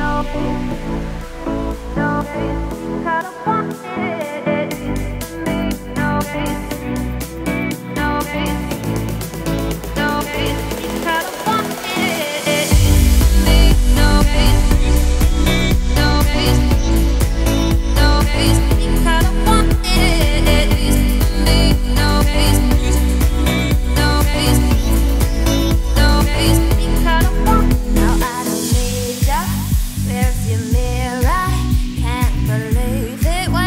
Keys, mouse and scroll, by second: 0.0 shift+s, 0.4 Tab, 0.6 shift+a, 1.9-2.9 scroll down 2, 2.9-4.3 drag, 4.5 Tab, 5.0 z, 5.2 scroll up 1, 5.7 r, 7.6 s, 8.5 1, 9.1 s, 9.9 Tab, 10.5 g, 11.3 z, 11.8 g, 12.6 scroll down 3, 12.8 middle click, 13.4 Tab, 14.3-14.9 scroll down 9, 14.9 middle click, 15.1-15.8 scroll up 3, 15.8 e, 17.4-17.9 scroll up 2, 17.9 ctrl+b, 20.1 Tab, 20.2 scroll down 4, 20.4-21.1 middle drag, 21.1-21.6 scroll up 5, 21.6-23.1 right drag, 23.1 click, 23.9 click, 24.3 scroll down 3, 24.4-25.0 middle drag, 25.0 scroll up 2, 25.2-25.8 scroll down 4, 25.5 click, 25.8-26.4 middle drag, 26.4 click, 26.6 scroll down 3, 26.7-27.3 middle drag, 27.3 `, 27.7 scroll down 3, 28.2-29.6 scroll up 5, 28.4 Tab, 29.6 z, 30.1 shift+middle click, 30.3 scroll up 2, 30.6 a, 31.5-32.4 scroll down 1, 32.4 shift+d.